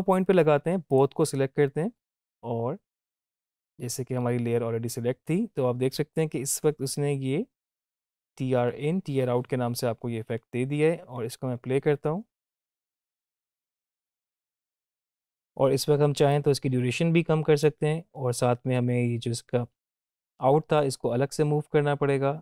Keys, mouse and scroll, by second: 0.9 click, 3.7 scroll up 1, 11.1 space, 15.2 ctrl+z, 16.6-17.9 drag, 20.7-22.4 drag.